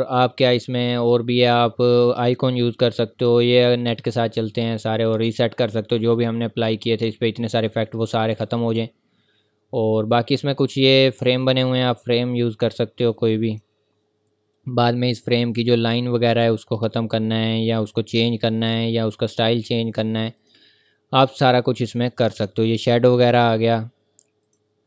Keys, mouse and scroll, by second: 4.0 click, 8.1 click, 11.1 click, 15.9 click, 20.4 click.